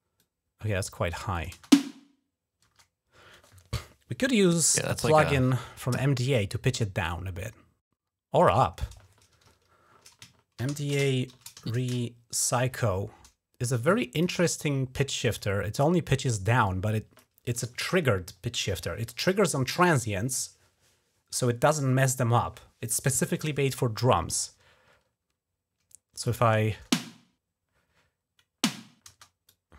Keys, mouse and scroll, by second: 0.0 click, 1.1 click, 5.7 click, 6.8 right click, 8.2 click, 10.1-11.9 typing, 13.9 click, 14.1 click, 15.1 click, 16.5 click, 26.0 click, 26.6 space, 28.9 space, 29.3 click.